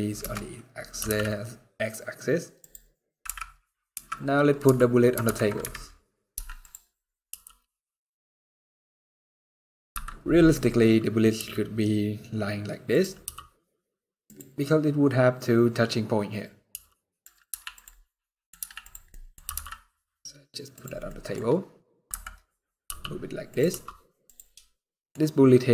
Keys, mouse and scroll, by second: 0.6 g, 2.9-7.0 typing, 4.9 ctrl+KP_3, 10.3-11.0 scroll up 1, 11.0 r, 12.9 g, 16.4 r, 17.2 z, 17.7 scroll down 4, 17.9 middle click, 18.7 scroll down 1, 18.8 middle click, 19.1 g, 20.6 scroll down 2, 20.7 middle click, 21.8 KP_7, 22.5 g, 23.4 r, 24.5 middle click.